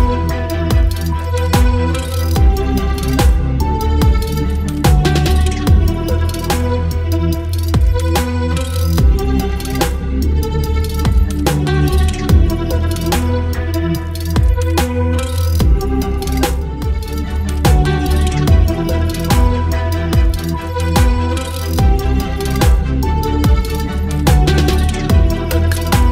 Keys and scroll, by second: 1.2 ctrl+j, 1.8 ctrl+t, 2.7 space, 4.0 Return, 6.2 ctrl+j, 6.9 ctrl+t, 9.8 space, 13.6 ctrl+t, 23.4 space, 24.2 ctrl+space, 24.5 ctrl+t.